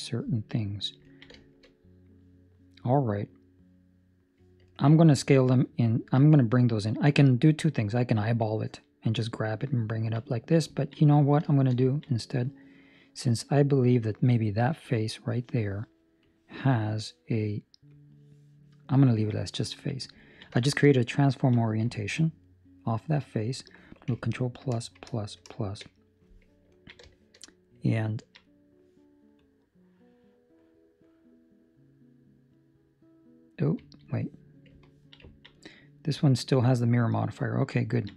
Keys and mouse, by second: 0.3 middle click, 1.0 ctrl+middle click, 1.2 shift+middle click, 1.6 middle click, 4.6 ctrl+middle click, 6.2 middle click, 8.1 middle click, 9.8 ctrl+middle click, 10.2 middle click, 10.6 ctrl+middle click, 10.9 middle click, 11.4 shift+middle click, 11.8 ctrl+middle click, 12.0 middle click, 13.0 right click, 16.2 click, 20.2 ctrl+middle click, 20.5 shift+middle click, 20.8 middle click, 21.4 click, 21.9 ctrl+middle click, 22.4 middle click, 23.0 middle click, 24.5 ctrl+KP_Add, 26.6 ctrl+middle click, 27.0 shift+middle click, 27.5 middle click, 28.0 ctrl+middle click, 28.4 middle click, 29.3 click, 34.8 ctrl+middle click, 35.5 ctrl+middle click, 37.7 ctrl+middle click.